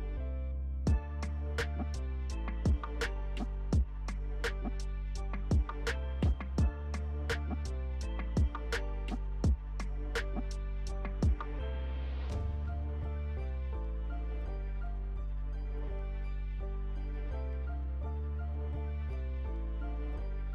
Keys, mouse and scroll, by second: 3.4 alt+click, 10.7-20.5 alt+drag.